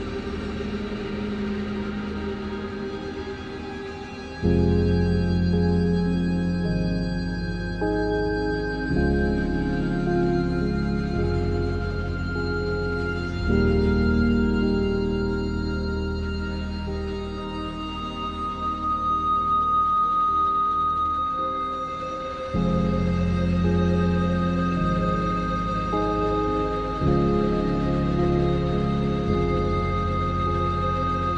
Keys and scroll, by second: 0.1 Return.